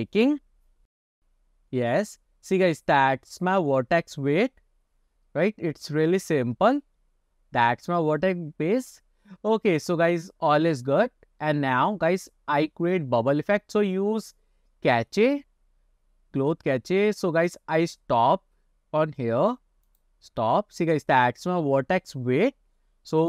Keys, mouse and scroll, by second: 20.2 click, 21.0-21.3 scroll up 2, 21.3 middle click.